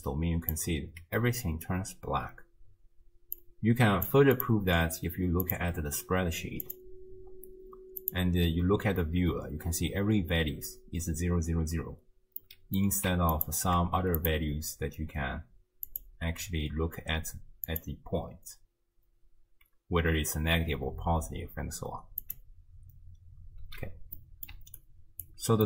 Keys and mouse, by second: 0.0 click, 3.5 click, 4.8-5.5 drag, 6.6 click, 12.4 click, 12.8 middle click, 13.3 ctrl+shift+click, 14.3-16.0 drag, 17.7 click, 22.2 click, 23.6 x, 24.2 click, 24.5 d, 24.8 click, 25.3 d, 25.4 d.